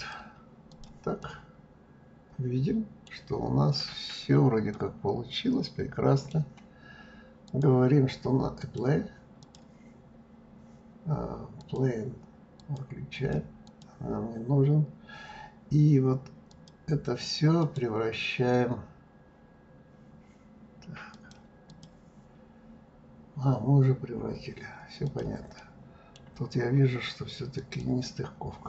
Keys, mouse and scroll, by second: 1.2-3.4 middle drag, 3.4-4.7 scroll up 7, 4.7-7.5 middle drag, 7.5 click, 8.6 click, 9.4 click, 11.5 click, 12.5 click, 13.1 click, 13.6 click, 16.5 click, 17.6-20.6 right drag, 21.0-24.1 drag, 25.1 click, 25.6-26.6 middle drag, 26.6-27.6 scroll up 4, 27.6 click.